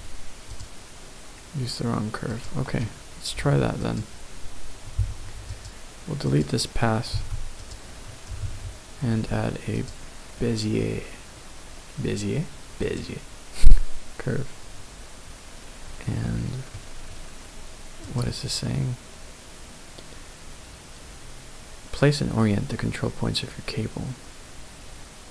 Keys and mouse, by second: 5.5 click, 6.3 click, 7.1 x, 8.4 shift+a, 12.8-25.3 drag.